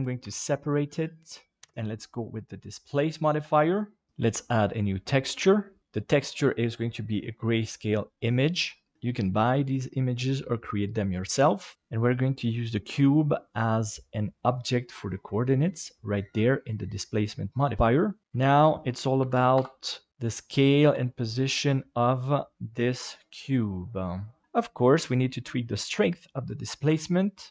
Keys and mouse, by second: 0.2 p, 1.6 Tab, 1.7-3.0 drag, 5.7 click, 13.4-14.6 drag, 17.7 right click, 18.3-19.6 drag, 20.1 g, 20.8 s, 23.1 middle click, 24.2 click, 27.4 click.